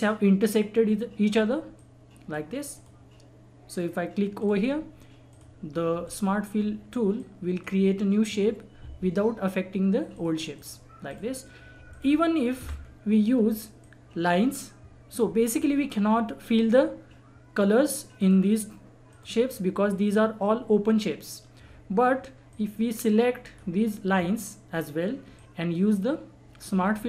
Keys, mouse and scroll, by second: 1.7 click, 1.7 click, 5.7 scroll down 1, 6.0 click, 6.5 scroll up 1, 7.2-9.6 drag, 9.6-10.0 scroll down 1, 10.1 click, 12.6 Delete, 12.8 scroll down 1, 13.3-13.7 scroll up 1, 13.8 click, 17.5-18.0 scroll up 1, 18.2 click, 19.5 scroll down 1, 20.0 click, 22.5-26.6 drag.